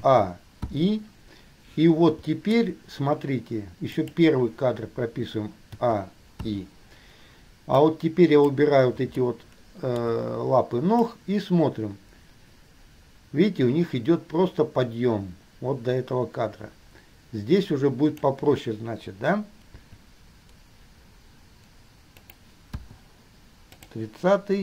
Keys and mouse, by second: 0.2 a, 0.8 i, 4.2 click, 5.9 a, 6.6 i, 8.1-8.8 drag, 9.3-10.3 shift+middle drag, 11.2-18.4 drag, 19.9 g, 22.9 i, 24.1 drag.